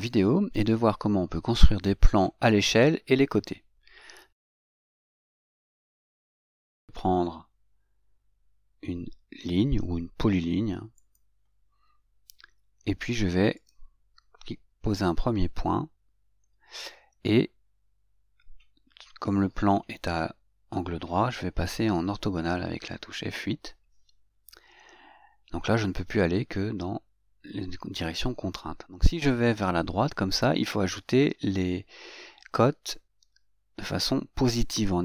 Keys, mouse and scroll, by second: 11.4 click, 13.9 click, 23.4 F8.